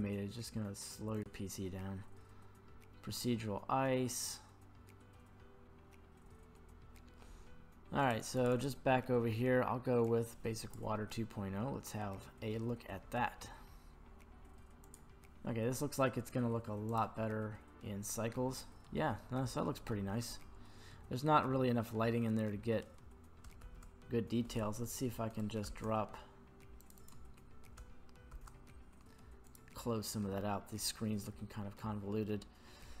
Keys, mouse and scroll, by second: 1.1 click, 8.0 click, 8.2 click, 8.3 click, 8.8-10.2 drag, 17.1 click, 18.9-19.9 middle drag, 20.2-21.1 middle drag, 21.8 scroll up 2, 22.5 scroll down 1, 23.6 shift+a, 28.3 shift+a, 31.1 scroll down 2, 31.4 middle click.